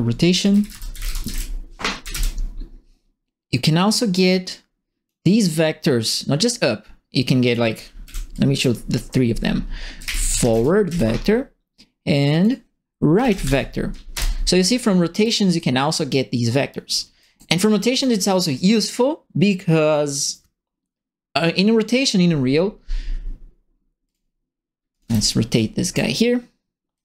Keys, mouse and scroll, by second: 0.1-1.8 typing, 2.0 Up, 2.1 Return, 3.9 right click, 4.5 click, 7.4 click, 8.0 Delete, 8.3 click, 9.7-11.0 typing, 12.2 click, 12.9-13.7 typing, 14.1 Return, 15.1 click, 16.5 click, 17.2 right click, 17.9 click, 24.0 click, 24.9 click, 25.0 e, 25.5 right click, 25.5 a, 26.9 click.